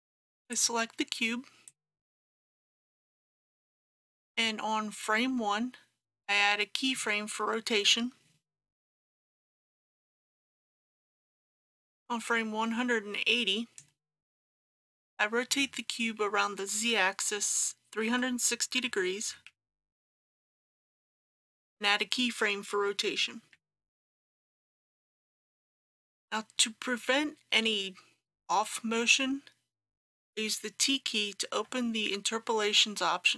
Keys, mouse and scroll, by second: 0.5-1.6 drag, 9.2 i, 10.6-14.7 drag, 18.1-19.7 typing, 23.5 i, 24.4 click, 31.7 t.